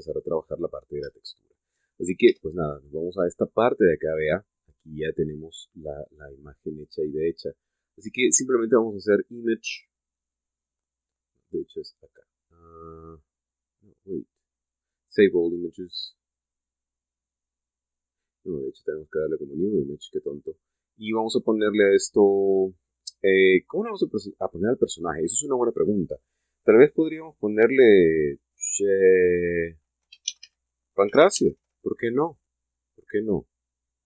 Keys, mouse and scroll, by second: 0.0-0.5 scroll down 4, 0.9-1.2 scroll up 2, 1.4 scroll down 2, 2.0 shift+middle click, 2.7 shift+middle click, 3.0 shift+Tab, 9.3 click, 19.9 click, 21.9 click, 30.7-32.3 typing.